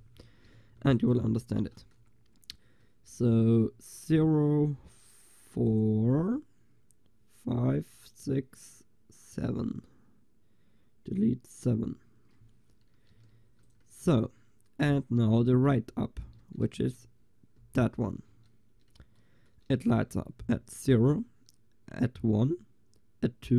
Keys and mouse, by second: 0.8 ctrl+s, 5.1-13.4 drag, 13.4 ctrl+s, 16.5 Tab, 16.9 a, 17.7 l, 18.4 Tab.